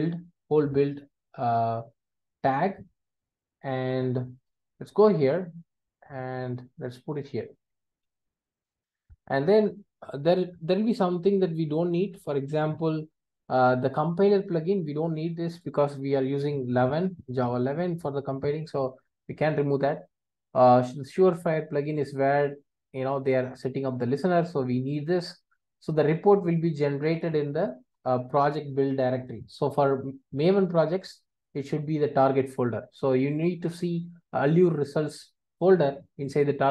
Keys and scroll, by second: 8.2 super+v.